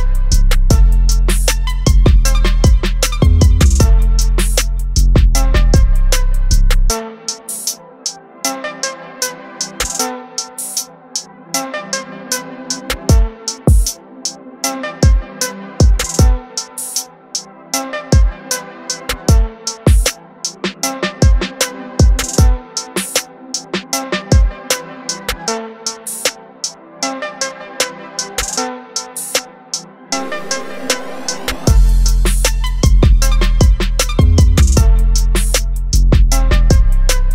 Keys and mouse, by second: 7.3 click, 10.9 click, 11.1 ctrl+alt+z, 15.1 click, 24.5 click, 28.0 click, 33.0 click, 36.1 click.